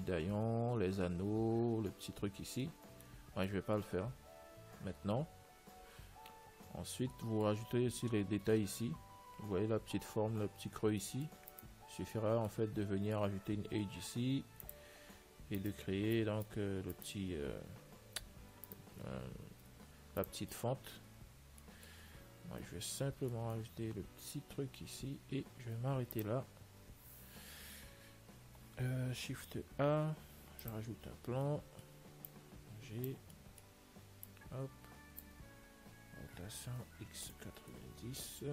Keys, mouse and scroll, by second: 2.8-3.3 scroll up 1, 3.3-9.0 middle drag, 11.3 middle click, 12.0-13.7 right drag, 12.4 Tab, 13.6 middle click, 14.5 ctrl+r, 16.5-18.5 right drag, 19.0-20.9 right drag, 19.9 x, 21.6 Tab, 21.9-26.7 middle drag, 26.3 ctrl+s, 29.5 shift+a, 32.3-33.4 middle drag, 32.6 click, 33.6-35.4 middle drag, 34.5 click, 36.5 r.